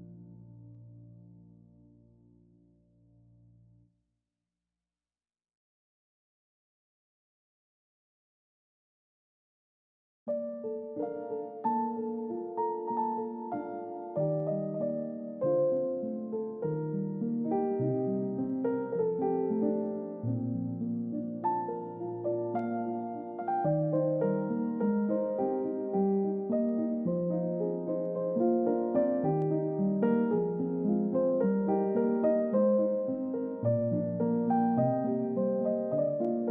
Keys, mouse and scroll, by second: 0.1-1.8 scroll up 1, 2.2 middle click, 4.9 scroll down 1, 5.1 middle click, 5.4-7.1 scroll up 1, 10.1-10.9 scroll down 1, 10.9 middle click, 11.8-12.4 scroll up 1, 12.4-15.1 scroll down 1, 15.1 scroll up 1, 15.9 middle click, 17.7 space, 19.1 typing, 22.9 typing, 23.3 double click, 23.9-24.9 scroll down 1, 29.8 scroll up 1, 32.3 scroll down 1, 35.1 1, 35.4 Return.